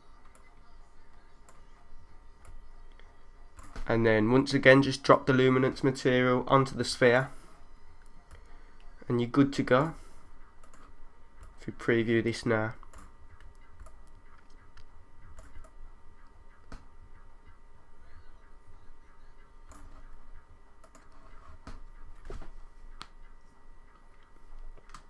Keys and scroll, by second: 2.5 3, 8.3 3, 11.4 3, 13.8 1, 15.6 3, 17.3 3.